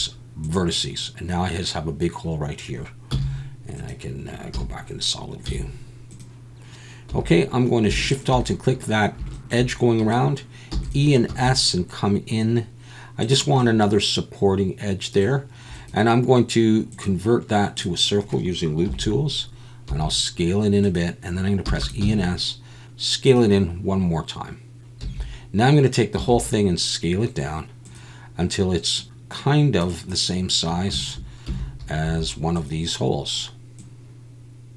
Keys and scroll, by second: 0.1 x, 3.1 z, 5.5 z, 7.1 2, 10.7 e, 11.3 s, 18.9 KP_1, 19.9 s, 21.6 e, 22.9 s, 25.0 a, 26.2 s, 31.5 a, 32.0 s.